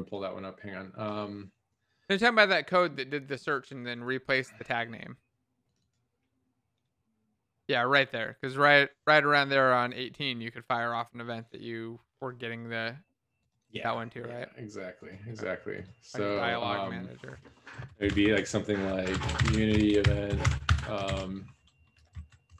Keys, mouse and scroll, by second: 18.0 Return, 18.1 Up, 18.2 Tab, 18.9-20.9 typing, 21.1 ctrl+., 22.1 Left, 22.4 Right.